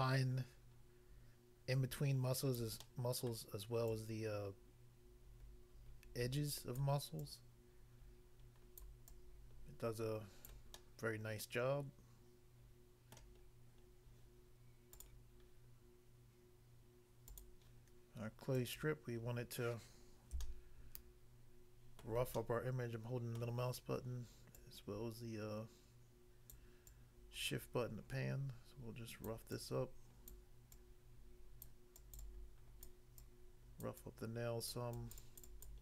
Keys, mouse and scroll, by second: 2.6 click, 2.9 middle click, 3.3 middle click, 6.8 click, 7.2 click, 8.8 click, 9.0 click, 10.5 click, 10.7 middle click, 13.1 middle click, 13.3 scroll down 1, 13.9-14.3 scroll down 1, 14.9 click, 15.1 click, 17.3 click, 17.4 click, 18.5 click, 18.7 click, 19.2 scroll up 1, 20.5 shift+middle click, 23.7 scroll up 1, 24.6 click, 26.6 click, 26.9 click, 29.3 click, 29.5 click, 30.3 click, 31.7 click, 31.9 click, 32.9 click, 33.9 click, 34.7 click, 35.7 click.